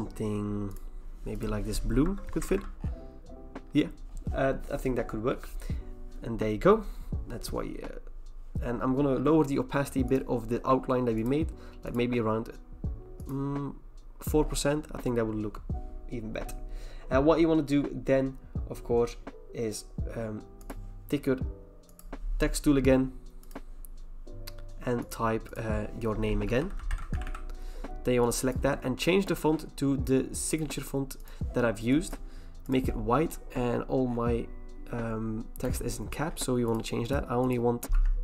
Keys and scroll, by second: 2.0 alt+BackSpace, 2.5 ctrl+d, 26.2-27.7 typing, 29.0-29.8 typing, 37.9 typing.